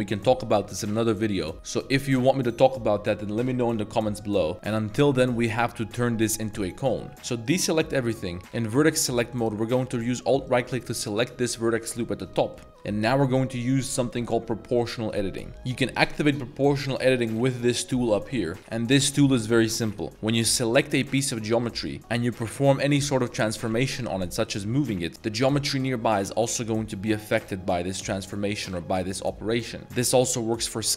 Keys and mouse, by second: 4.5 Tab, 7.1 1, 7.5 click, 10.5 alt+click, 12.4 middle drag, 17.4 click, 20.3-21.0 drag, 21.0-21.5 middle drag, 21.7 shift+middle drag, 25.1 g, 25.4 g, 29.8 s.